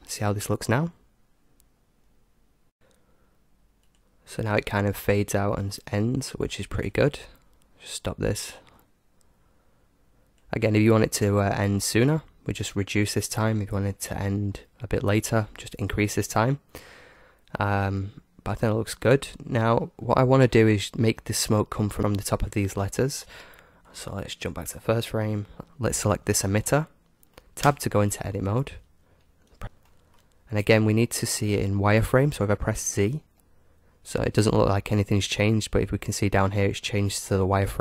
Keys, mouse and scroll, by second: 4.7-6.3 drag, 7.4-10.4 drag, 19.3-22.0 middle drag, 23.8-25.6 drag, 25.6 middle click, 26.5 right click, 27.3 click, 27.4 middle click, 28.0 Tab, 28.5-29.6 middle drag, 29.6 KP_1, 29.9-32.7 middle drag, 33.3 z.